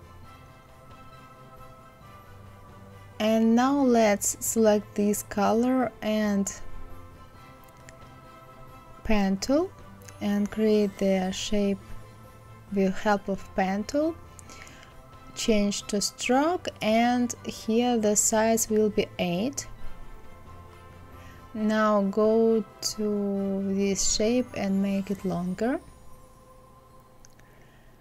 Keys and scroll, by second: 15.1 Escape, 18.4 KP_8, 18.8 Return.